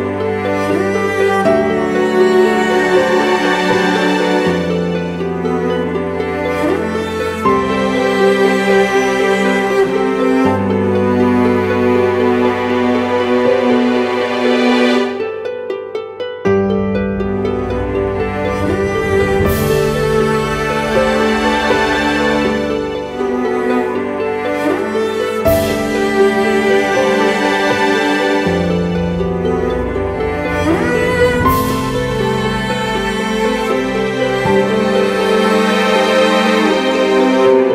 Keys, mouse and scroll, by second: 1.2-1.5 scroll down 1, 1.8 scroll down 1, 2.1 typing, 3.6 typing, 11.3-12.1 typing, 18.7 typing.